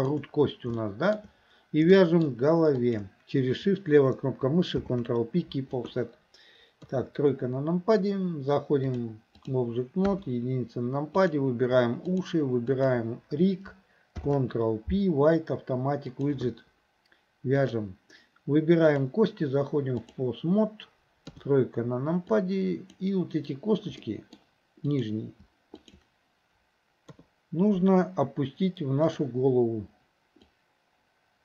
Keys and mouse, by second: 0.0 shift+click, 0.8 shift+middle click, 2.0 shift+middle click, 2.8 shift+click, 4.8 ctrl+p, 6.8 KP_3, 8.9-9.7 drag, 10.1 KP_1, 11.3 click, 12.2 shift+click, 12.8 shift+click, 14.2 ctrl+p, 17.7 click, 19.1-20.3 drag, 21.3 KP_3, 22.5 click, 24.1 middle drag, 27.1 KP_3, 29.1 click, 30.6-31.4 drag.